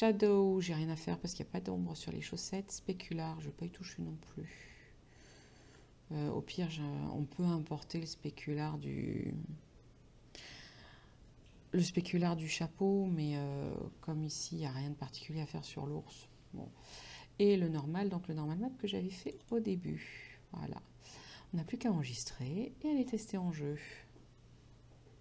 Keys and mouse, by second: 2.5 click, 16.2 click.